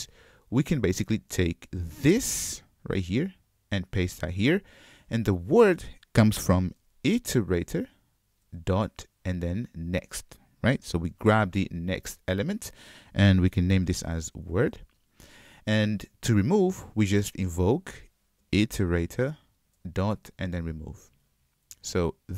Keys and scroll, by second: 3.0 super+c, 3.8 super+v, 8.6 Return, 10.0 Return, 11.2 alt+super+v, 19.6 Return.